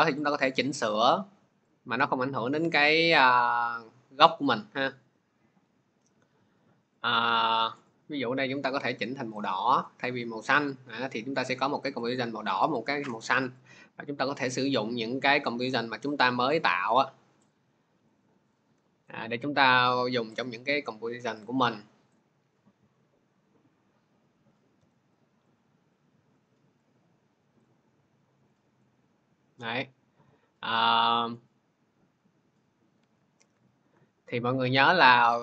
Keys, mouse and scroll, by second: 0.0 click, 0.3 click, 0.5 click, 1.6 click, 2.8 click, 6.8 click, 7.7 click, 9.2 click, 9.7 click, 10.5 click, 11.8 click, 12.6 click, 13.4 click, 15.6 click, 17.3 click, 18.1 click, 18.5 Delete, 20.2 click, 22.0 click, 24.6 v, 25.3 click, 26.3 click, 27.5 click, 28.7 click, 33.0 ctrl+z, 33.4 ctrl+z, 35.1 ctrl+z.